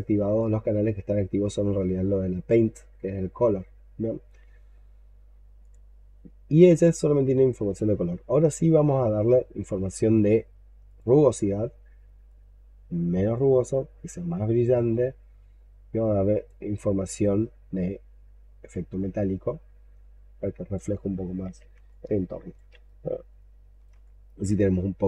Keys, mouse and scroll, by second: 1.6-5.0 scroll down 6, 7.0-10.0 scroll down 7, 11.2-14.3 scroll down 8, 20.9-21.7 scroll down 18, 21.8 alt+click, 22.7 shift+right click, 23.9 alt+click.